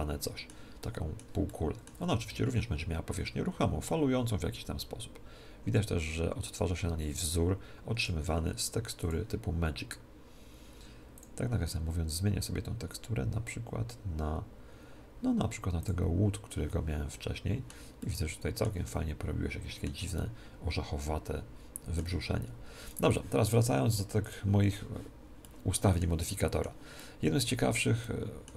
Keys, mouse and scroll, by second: 2.2 s, 2.8 s, 3.0 scroll up 1, 3.1 middle click, 8.9-10.9 drag, 11.1-13.0 drag, 17.0-21.9 middle drag, 22.2 middle click, 22.8-24.6 right drag, 24.2-26.0 drag, 24.6 middle click, 24.8-28.5 middle drag.